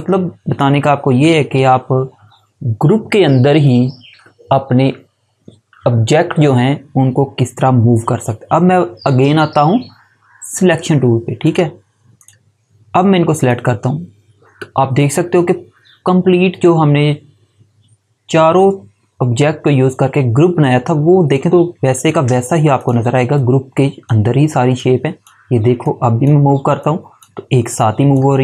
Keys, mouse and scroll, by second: 11.3 click, 21.9 click.